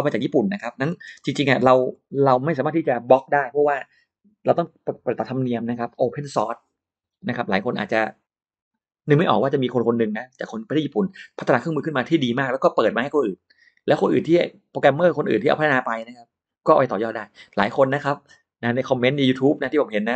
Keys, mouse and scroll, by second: 0.3 click, 1.0 space, 1.1-1.4 scroll up 1, 1.7 scroll down 1, 1.9 middle click.